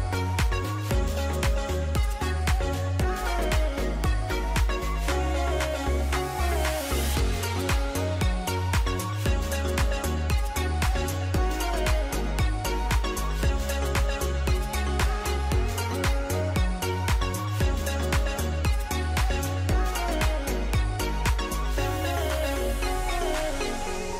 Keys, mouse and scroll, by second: 5.4 alt+click.